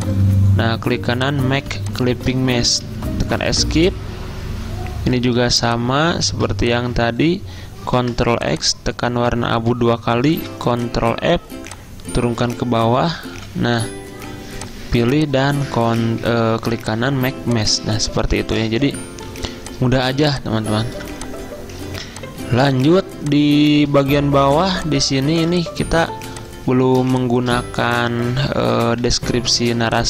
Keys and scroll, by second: 2.9 shift+Escape, 8.1 ctrl+x, 10.4 ctrl+f, 18.8 ctrl+shift+Escape, 19.5 z, 21.0 v, 22.4-23.1 typing, 25.5 v, 29.1 F1.